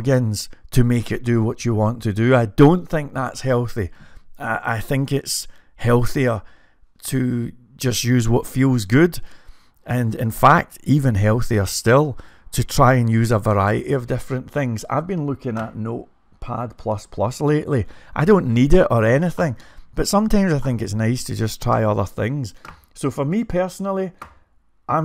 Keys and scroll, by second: 8.0-8.7 typing.